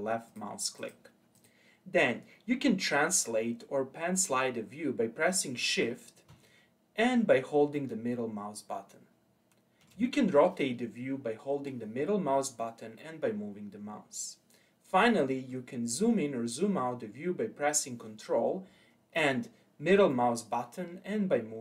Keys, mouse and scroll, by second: 0.2 click, 0.7 click, 1.3 click, 2.0-4.9 scroll down 1, 7.7-10.7 shift+middle drag, 12.9-16.0 middle drag, 20.0-21.6 ctrl+middle drag.